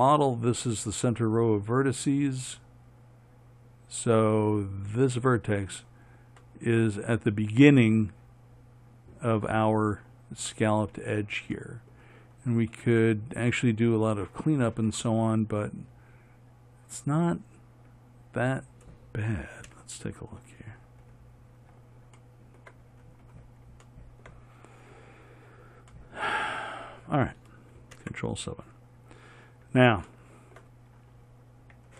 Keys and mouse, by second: 5.3-7.3 right drag, 20.0 KP_1, 20.8 middle click, 28.3 ctrl+KP_7.